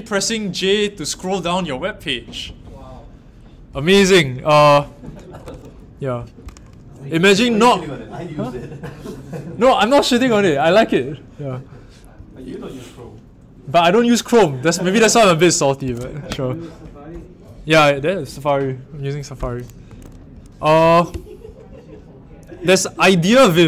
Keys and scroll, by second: 19.8 super+w, 23.5 super+t, 23.5-23.6 typing.